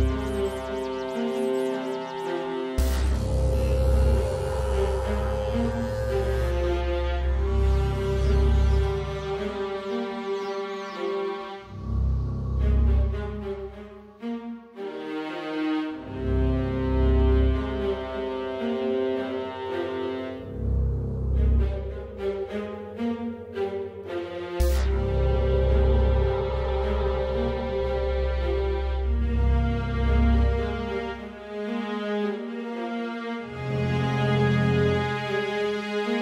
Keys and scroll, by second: 25.2 Up, 35.0 Right, 35.1 Right, 35.2 Down, 35.3 Down, 35.4 Down, 35.6 Down, 35.8 Left, 35.9 Left.